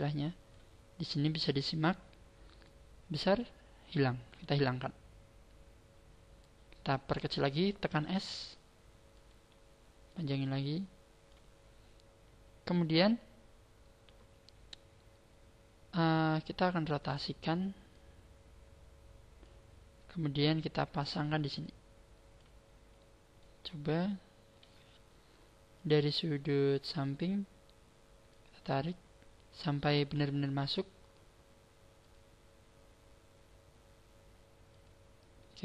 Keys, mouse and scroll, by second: 2.6 click, 5.2-5.8 scroll down 3, 8.1 s, 9.3 click, 10.1 click, 11.8-12.7 scroll up 3, 16.8 click, 17.9 click, 20.6 click, 21.6 click, 22.8-23.3 scroll down 3, 23.3 middle click, 23.3 scroll down 2, 25.7 click, 27.5-28.3 scroll up 2, 28.3 click, 28.3-28.9 scroll up 1, 31.9 click, 34.8 click.